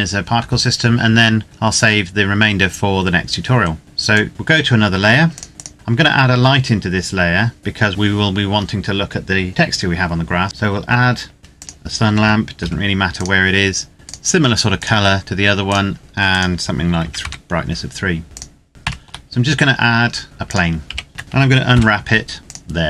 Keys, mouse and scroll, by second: 3.9 click, 7.6 shift+a, 11.4 click, 12.4 g, 12.9 click, 16.8 KP_3, 17.0 KP_Enter, 18.2 click, 18.7 shift+a, 20.3 click, 20.8 KP_7, 21.1 Tab, 21.5 u, 22.4 click.